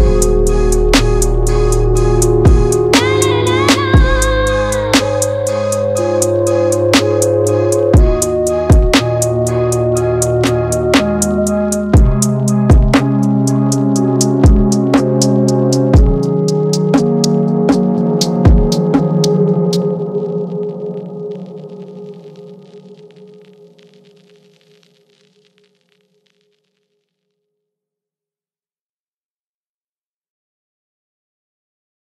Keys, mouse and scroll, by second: 0.1 ctrl+c, 1.1 click, 2.0-3.3 middle drag, 3.3 click, 4.8-6.4 middle drag, 5.6 ctrl+v, 6.4-9.2 drag, 10.2 click, 10.6 ctrl+v, 11.3 click, 12.7-15.5 middle drag, 15.5 click, 16.2 click, 16.5 ctrl+v, 17.3 click, 21.0 click, 22.7 shift+click, 23.3 shift+click, 23.8 shift+click, 25.2 ctrl+c, 26.1 ctrl+v, 31.1 click.